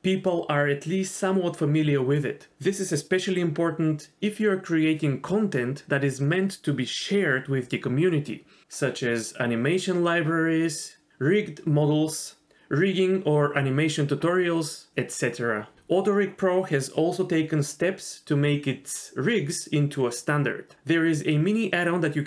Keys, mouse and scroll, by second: 0.1 Tab, 2.0 shift+click, 4.3 Tab, 12.3 click, 17.2 click.